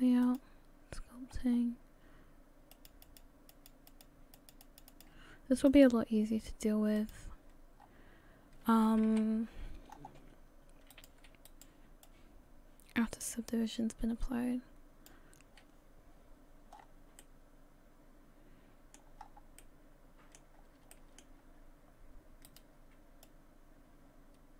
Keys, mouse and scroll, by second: 5.7 click.